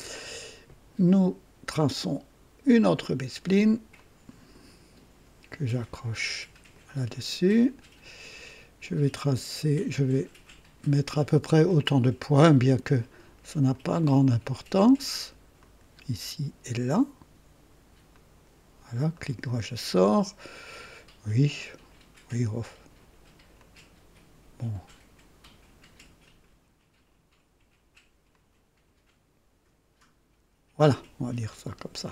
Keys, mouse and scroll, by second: 3.9 click, 6.7 click, 9.7 click, 11.7 click, 13.7 click, 15.6 click, 18.1 click, 19.1 right click, 21.2 right click, 23.5 click, 28.3 click, 31.4-31.8 scroll up 2, 31.9 right click.